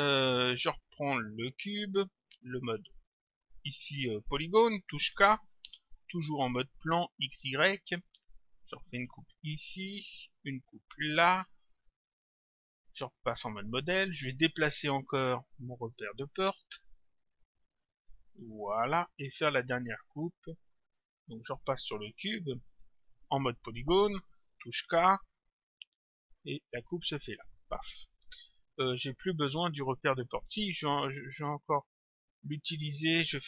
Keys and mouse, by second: 1.4 click, 2.6 click, 5.1 k, 9.3 click, 11.7 click, 13.3 click, 14.6 click, 15.9 click, 22.0 click, 23.2 click, 24.6 k, 27.1 click, 30.9 click, 32.4 click.